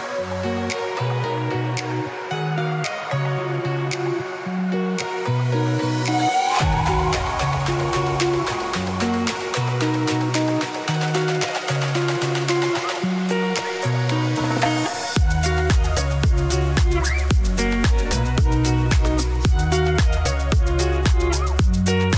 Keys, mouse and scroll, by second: 0.9 shift+s, 1.4 Tab, 2.1 shift+a, 2.7 Tab, 3.0 s, 6.6 i, 7.2 a, 7.4 middle click, 7.9 g, 8.3 middle click, 9.3 a, 17.2 Tab, 18.3 shift+a, 19.1 click, 19.5 Tab, 20.5 s, 21.1 Tab, 21.3 middle click, 21.4 g, 22.0 middle click.